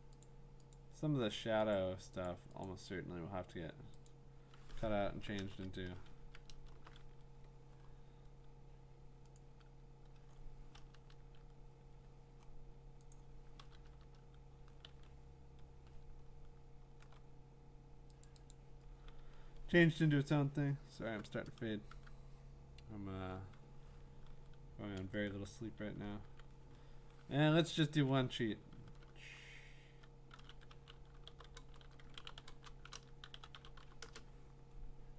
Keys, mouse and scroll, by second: 0.2 click, 0.7 click, 1.7 click, 2.3 click, 2.7 click, 4.1 click, 5.4 BackSpace, 6.1 Escape, 6.5 alt+BackSpace, 8.7 BackSpace, 9.4 click, 10.9 BackSpace, 13.1 click, 14.9 ctrl+d, 16.3 scroll down 3, 16.6 scroll, 16.6 BackSpace, 18.2 click, 18.5 click, 19.2 alt+scroll, 21.9 alt+Tab, 25.3 click, 26.2 ctrl+w, 27.6 ctrl+t, 30.1-34.3 typing.